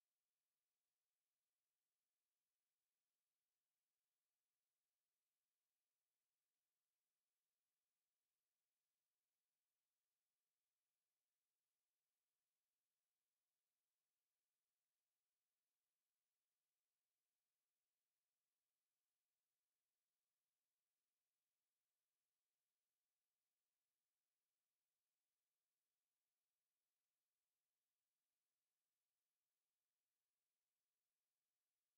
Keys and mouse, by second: 1.3 alt+click, 3.2 alt+click, 3.9 alt+click, 5.0 alt+click, 5.8 alt+click, 6.5 click, 6.9 alt+click, 7.5 alt+right click, 8.4 shift+right click, 11.0 click, 12.3 alt+click, 12.9 w, 13.6 click, 13.8 right click, 14.5 click, 15.2 right click, 16.2 click, 16.7 shift+right click, 19.4 click, 20.3 right click, 25.1 click, 26.7 alt+click, 27.1 alt+right click, 27.6 alt+click, 28.3 alt+right click, 28.8 alt+right click, 30.3 click, 31.5 alt+click.